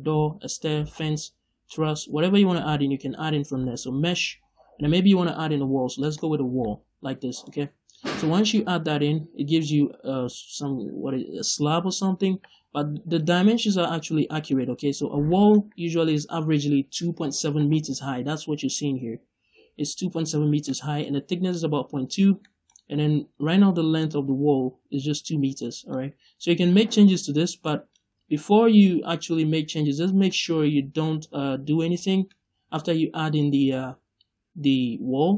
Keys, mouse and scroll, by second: 6.3 scroll down 2, 6.5-7.0 middle drag, 7.6-8.1 scroll up 2, 12.5-12.8 scroll up 2, 12.8 middle click, 15.2-35.3 middle drag.